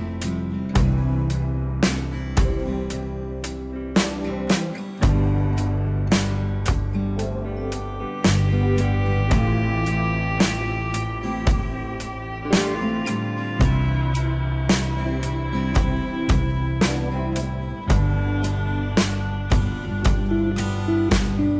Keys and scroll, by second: 5.6 alt+w.